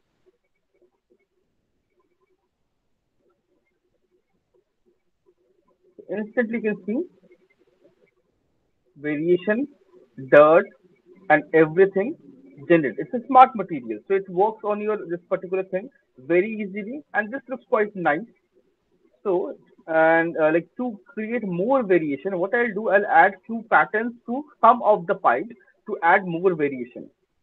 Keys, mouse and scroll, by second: 4.1 m, 5.1 alt+click, 5.3 alt+middle click, 5.6 alt+right click, 6.1 alt+right click, 6.4 alt+middle click, 7.1 alt+right click, 7.5 alt+middle click, 8.7 alt+middle click, 10.2 alt+click, 10.9 alt+middle click, 11.3 alt+middle click, 12.1 alt+scroll, 12.5 alt+middle click, 12.5 alt+click, 12.7 alt+middle click, 15.6 alt+click, 15.6 alt+middle click, 16.0 alt+middle click, 17.2 alt+click, 22.3 alt+click, 22.8 alt+click.